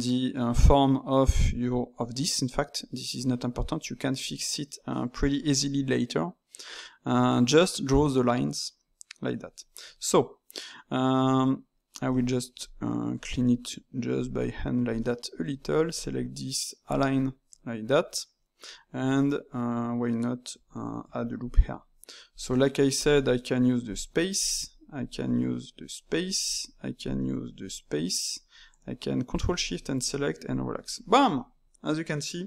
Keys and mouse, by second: 9.6-12.5 middle drag, 12.5 click, 13.4 click, 14.3 click, 14.9 middle click, 15.5 alt+click, 16.8-18.3 drag, 18.3-21.0 middle drag, 21.0 ctrl+r, 22.3 click, 23.0 ctrl+shift+click, 23.8 click, 24.9 ctrl+shift+click, 25.7 click, 26.9 ctrl+shift+click, 27.6 click, 29.5 ctrl+shift+click, 30.4 click, 31.3-32.4 middle drag.